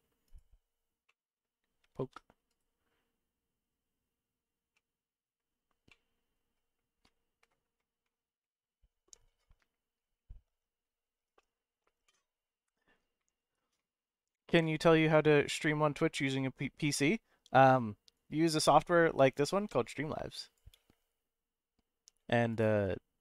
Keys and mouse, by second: 1.1 middle click, 2.0 ctrl+z, 2.5-4.4 right drag, 4.8 middle click, 5.9 middle click.